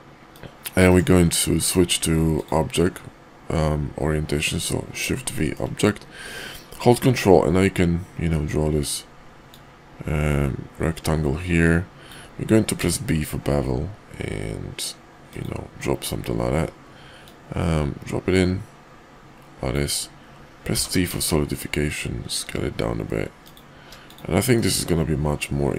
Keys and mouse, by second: 0.3-1.0 drag, 1.6 shift+v, 5.4 shift+drag, 9.5-15.4 ctrl+drag, 15.8 middle drag, 24.5-25.7 middle drag.